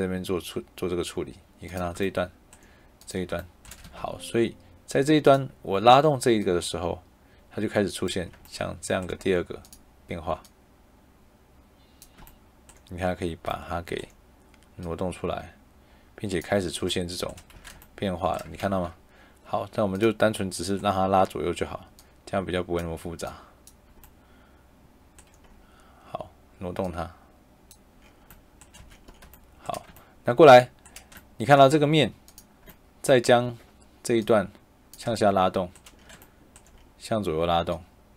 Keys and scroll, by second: 3.6 shift+Escape, 17.4 Escape, 18.5 ctrl+z, 28.7 Escape.